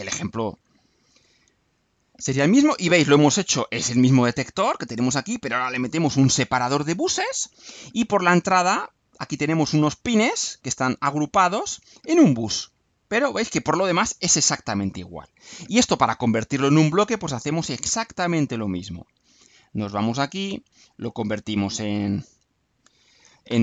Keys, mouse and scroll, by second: 20.0 click, 21.2 click, 22.2 click.